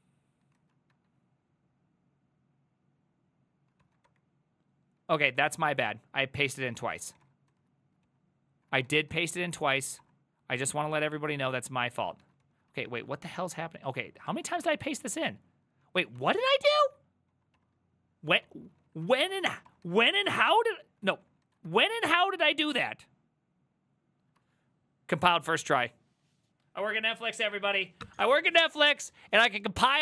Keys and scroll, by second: 0.6 ctrl+a, 1.0 1, 3.9 ctrl+c, 4.3-7.6 typing, 6.7 ctrl+c, 8.1 ctrl+c, 8.8-9.9 typing, 9.1 ctrl+a, 9.7 Up, 10.0 Return, 12.0-20.6 typing, 21.1 ctrl+c, 21.2 ctrl+c, 21.3 ctrl+c, 21.5 ctrl+a, 21.7 3, 22.0 Up, 22.7 Return.